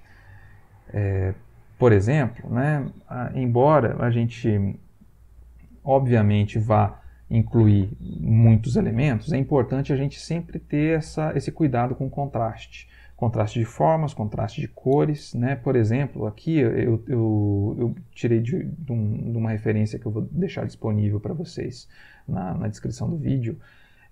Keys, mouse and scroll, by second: 1.3 Right.